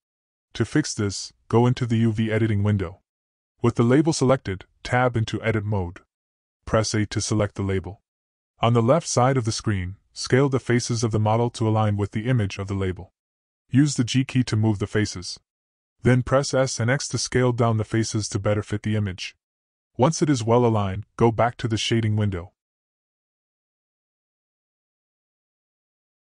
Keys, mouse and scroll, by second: 1.7 Tab, 2.5 a, 4.4-5.3 drag, 6.4 g, 8.8-10.0 drag, 10.3 g, 12.4-13.1 drag, 13.1 s, 16.1 g, 16.7 s, 18.1 s, 23.1 g.